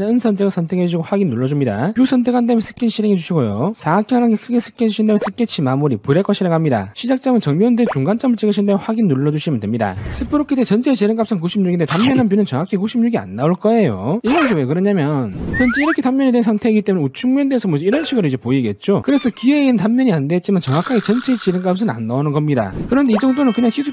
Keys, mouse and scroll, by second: 2.8 click, 3.5 s, 4.3 3, 4.7 click, 5.4 click, 6.2 click, 8.6 click, 9.4 click, 17.8 click, 18.6 middle click, 19.4 shift+middle click, 20.5 middle click, 21.0 middle click, 22.0 shift+middle click, 23.6 click.